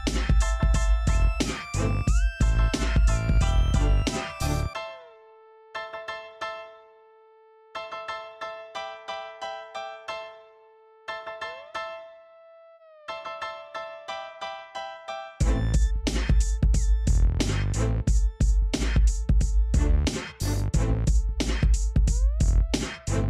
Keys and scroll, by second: 1.8 Escape, 2.7 x, 7.9-8.9 typing, 10.9 e.